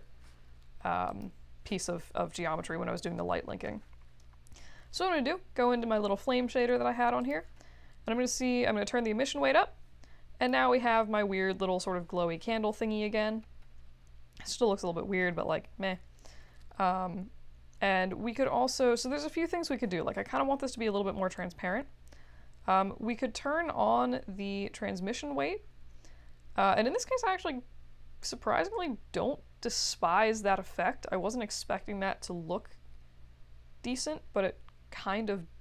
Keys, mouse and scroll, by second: 1.0 click, 7.2 click, 8.3-10.4 drag, 14.5-15.4 scroll down 2, 15.4-16.2 scroll down 1, 17.7-18.4 scroll up 2, 21.3-30.7 drag.